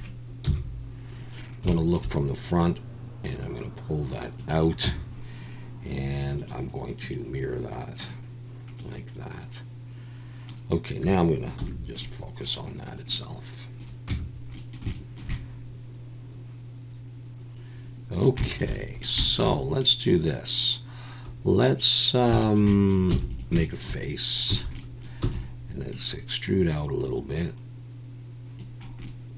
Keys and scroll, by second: 0.4 KP_1, 4.8 Tab, 11.6 /, 14.1 Tab, 23.1 f, 24.5 a, 25.2 e.